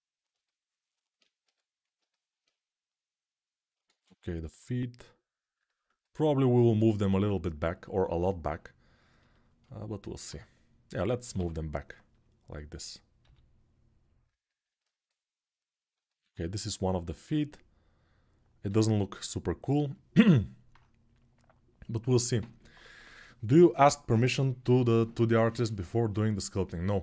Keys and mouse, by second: 1.2 g, 1.7 alt+right click, 2.2-6.0 middle drag, 2.7-14.0 drag, 3.6 ctrl+z, 11.1 l, 13.0 g, 14.0-17.3 alt+middle drag, 17.3-19.2 drag, 18.4 g, 19.2-20.9 middle drag, 20.9-27.0 drag.